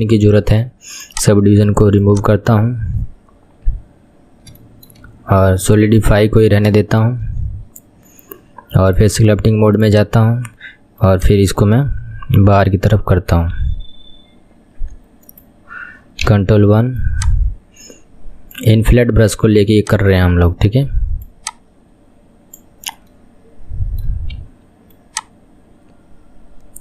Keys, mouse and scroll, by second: 1.2-2.2 drag, 3.1-4.2 scroll up 6, 4.2-4.7 scroll down 3, 4.8-7.8 shift+middle drag, 7.8-10.2 scroll down 2, 10.2 click, 11.2-14.2 drag, 16.4 ctrl+KP_1, 17.2-23.3 drag, 23.3-24.5 middle drag, 24.5 KP_1, 25.1-26.8 drag.